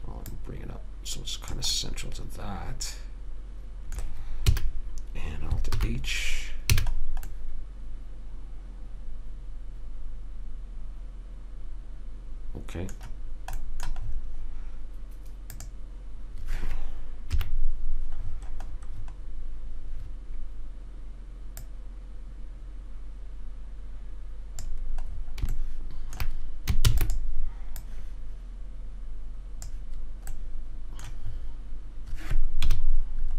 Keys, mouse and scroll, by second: 0.6 click, 2.1-3.8 middle drag, 4.8 a, 6.1 alt+h, 7.1 a, 15.8-17.4 right drag, 17.4 click, 17.7 KP_3, 18.6 middle click, 21.9 click, 27.2 shift+d, 28.1 right click, 33.0 KP_Decimal.